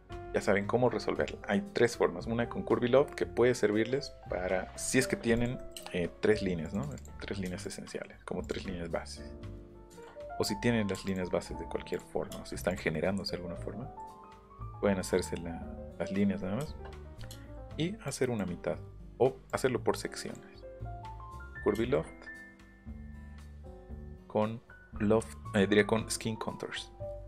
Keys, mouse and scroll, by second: 0.1 scroll down 1, 0.3 scroll up 1, 1.9 scroll up 1, 4.9 middle click, 5.3 click, 5.6 middle click, 5.9-6.2 scroll up 1, 6.6 click, 6.8 click, 7.2 scroll down 1, 7.6 click, 8.4 click, 8.6 scroll up 1, 9.6 ctrl+z, 9.9 ctrl+z, 10.9 m, 11.1 click, 12.4 space, 12.7 click, 15.2 middle click, 16.4 scroll down 1, 16.6 shift+middle click, 17.0 scroll down 1, 17.3 shift+middle click, 20.8 middle click, 23.8 click.